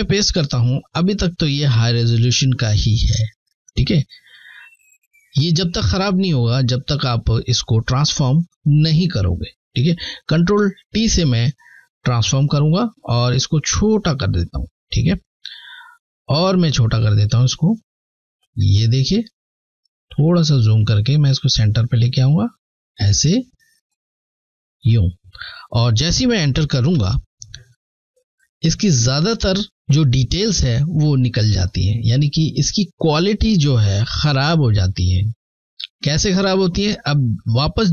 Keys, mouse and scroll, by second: 2.6 click, 6.7 alt+scroll down 1, 7.9 alt+scroll down 1, 9.6 t, 12.5 shift+click, 16.8 shift+click, 17.2 shift+click, 19.0 scroll up 2, 19.9 alt+scroll up 1, 21.1 click, 23.2 shift+click, 26.0 Return, 30.5 Return, 30.6-31.3 scroll up 2, 31.5-32.1 alt+scroll up 1, 32.2 alt+scroll up 1, 33.8 click, 33.9 click, 36.7 t, 37.3 ctrl+t.